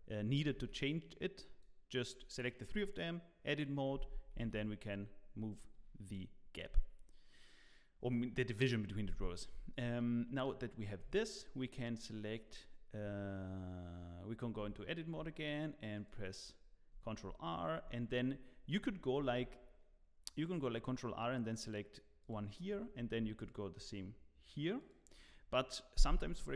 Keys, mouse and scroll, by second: 0.1 1, 0.5 alt+a, 1.0 click, 4.3 g, 6.6 Tab, 10.9 Tab, 12.1-12.7 scroll up 1, 12.7-13.9 scroll up 1, 15.0 ctrl+r, 19.1 g, 23.0 ctrl+r.